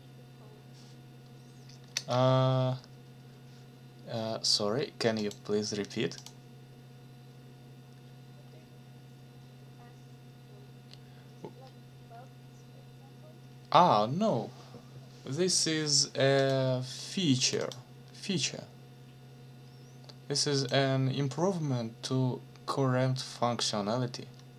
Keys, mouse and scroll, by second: 1.9 ctrl+c, 5.2 click, 6.2 click, 16.4 click, 17.4 click, 20.6 click.